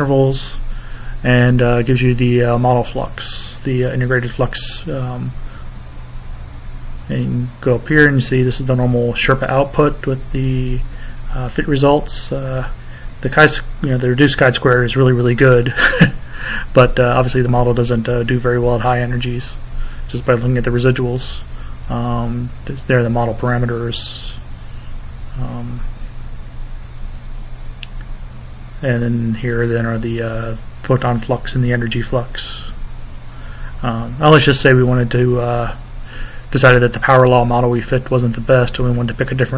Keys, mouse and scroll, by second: 3.7 click, 5.3-7.5 drag, 9.9-11.4 drag, 12.3 click, 17.4-18.9 drag, 19.3 click, 23.1-26.7 drag, 27.9 click, 29.2 click, 35.1 click, 37.2 click, 38.9 click.